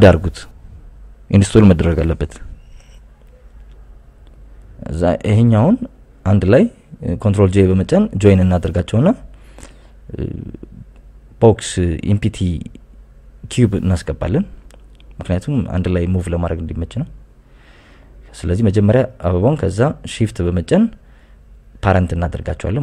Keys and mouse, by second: 0.6 shift+d, 1.7 Escape, 2.0 r, 2.3 z, 3.8 KP_9, 4.0 KP_0, 4.2 KP_Enter, 5.7-6.2 drag, 9.2 ctrl+j, 10.4 shift+a, 11.4 shift+s, 13.4 shift+a, 16.3 s, 17.1 click, 17.5 g, 17.8 z, 18.8 click, 19.9 click, 20.8 right click, 21.8 shift+right click, 22.4 ctrl+p.